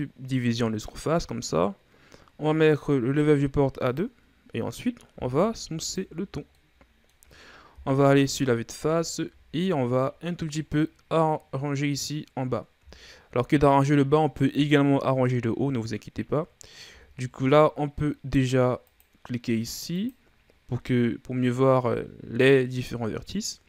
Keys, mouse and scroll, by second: 4.4-5.7 drag, 5.7 w, 7.1-8.3 middle drag, 8.3 KP_1, 9.6-10.1 ctrl+scroll down 4, 10.1-12.8 scroll up 1, 13.5-16.7 shift+scroll up 2, 17.1 scroll up 1, 17.4 Tab, 19.4-20.6 drag.